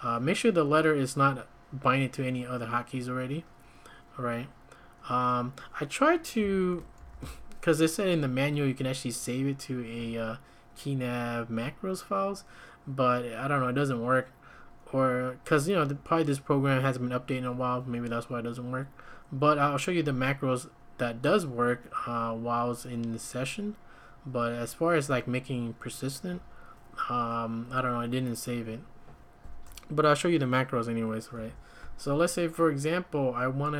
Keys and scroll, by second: 6.4-7.0 typing.